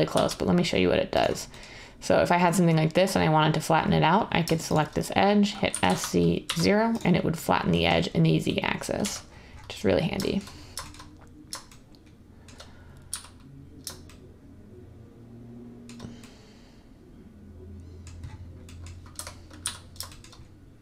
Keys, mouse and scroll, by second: 0.0-0.1 typing, 5.6-6.4 typing, 9.0 1, 13.0 z, 19.1 1, 19.6 z.